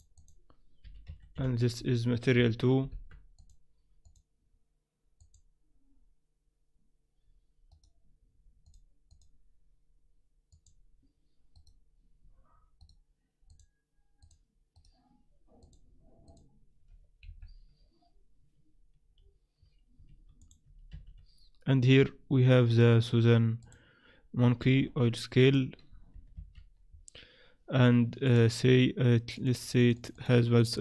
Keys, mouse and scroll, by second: 3.4 click, 4.0 click, 7.7 right click, 8.6 click, 9.1 click, 11.5 right click, 12.8 right click, 13.5 click, 14.7 right click, 15.6 click, 17.2 KP_1, 19.2-19.6 scroll down 1, 19.9 scroll down 1, 20.6 click, 20.9 shift+a, 24.6 s, 26.4 ctrl+2, 28.2 click, 29.3 click, 29.6-30.1 click, 29.8 click, 29.9 click.